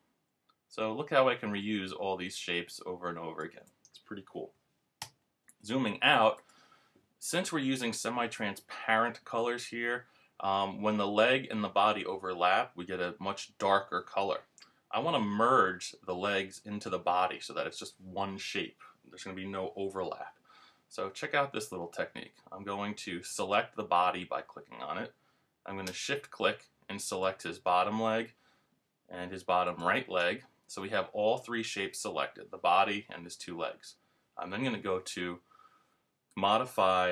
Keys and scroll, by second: 5.0 super+-.